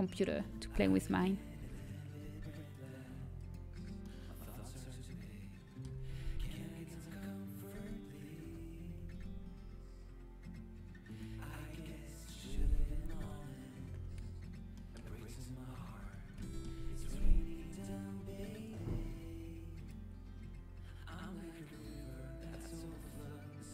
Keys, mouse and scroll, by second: 3.0 s, 8.0 s, 13.1 KP_7, 13.9 z, 16.3 a, 19.2 b, 21.8-23.5 drag, 22.9 a.